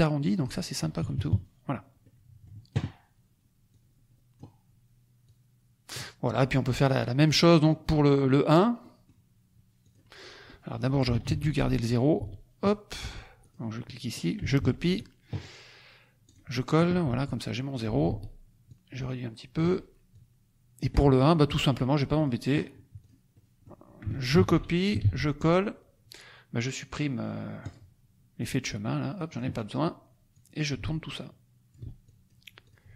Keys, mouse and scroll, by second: 1.0 KP_Subtract, 2.0 middle click, 3.7 click, 5.2 click, 6.7 click, 7.3 click, 7.6 middle click, 8.1 scroll down 2, 8.8 middle click, 9.8 click, 10.2 middle click, 11.2 ctrl+d, 11.8 ctrl+click, 13.3 ctrl+click, 14.8 ctrl+c, 15.0 ctrl+click, 16.2 click, 17.2 click, 18.6 ctrl+shift+click, 20.1 ctrl+shift+click, 22.2 click, 23.3 middle click, 24.3 ctrl+c, 25.0 ctrl+v, 27.6 click, 28.7 click, 30.3 click, 32.0 ctrl+click, 32.6 ctrl+click.